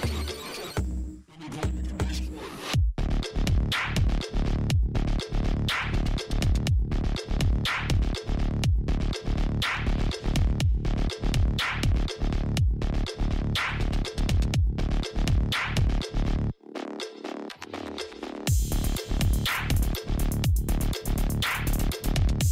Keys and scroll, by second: 0.0 alt+i, 10.4 alt+i.